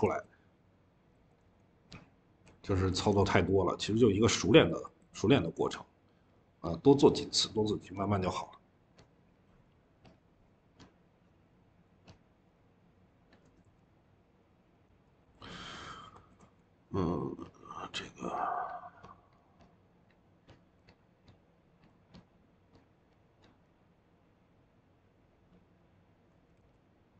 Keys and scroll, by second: 2.8 ctrl+z, 16.3 e.